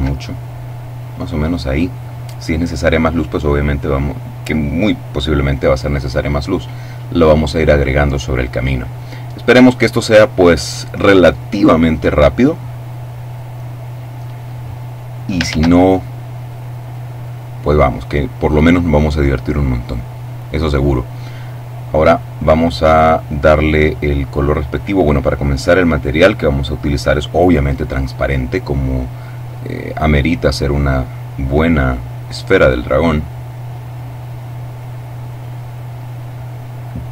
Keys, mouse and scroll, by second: 1.0 click, 6.0-7.0 middle drag, 7.2 click, 8.0 click, 8.9 click, 11.0 click, 15.5 shift+a, 16.8 click, 18.1-20.3 drag, 22.1 click, 23.1 click, 24.5 click, 25.7 click, 26.7 click, 29.6-31.3 middle drag, 31.5-32.8 middle drag, 32.8 click, 34.1 middle click, 35.3 click, 36.1-37.1 drag.